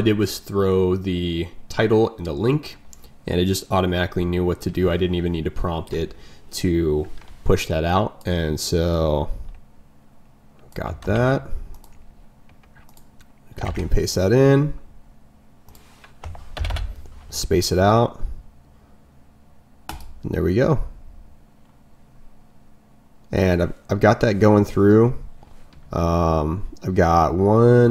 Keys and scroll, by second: 11.0 ctrl+m.